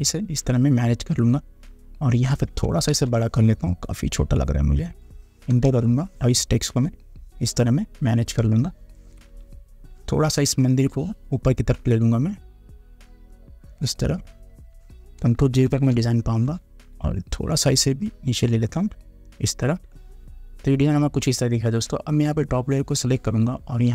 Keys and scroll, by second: 3.1 ctrl+t, 5.7 Return, 8.6 Return, 15.8 ctrl+0.